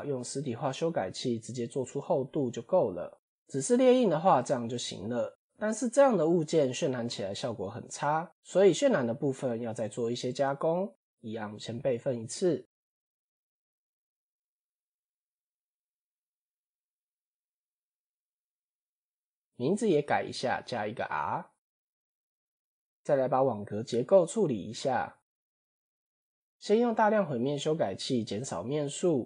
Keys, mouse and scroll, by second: 0.1 click, 0.8-1.9 drag, 2.3-3.4 drag, 3.9-4.2 middle drag, 5.3 KP_7, 11.4 shift+d, 13.8 click, 15.0 click, 15.8 click, 16.5 click, 17.0 click, 17.2-22.4 drag, 18.4 BackSpace, 18.6 BackSpace, 24.3 click, 24.8 click, 26.8 click, 27.5-29.2 drag.